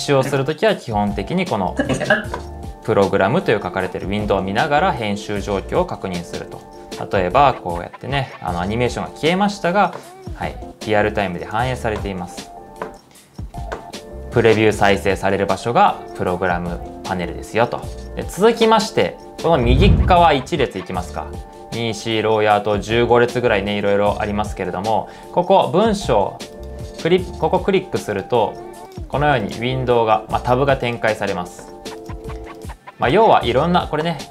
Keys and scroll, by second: 0.0-1.6 typing, 6.5-7.2 typing, 21.3 Return, 21.3 shift+z.